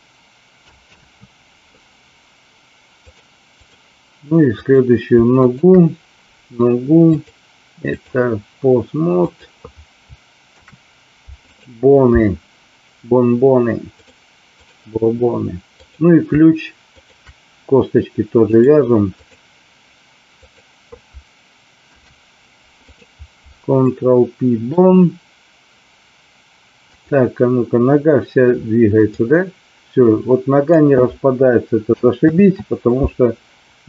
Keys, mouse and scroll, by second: 1.1 ctrl+z, 3.1 click, 5.4 shift+click, 7.0-8.0 drag, 9.2 click, 10.5 ctrl+p, 13.9 click, 15.7 click, 16.9 shift+click, 18.6 click, 20.4 click, 21.9 ctrl+p, 23.8-24.6 middle drag, 26.9 click, 28.9-30.7 drag, 32.4 ctrl+z.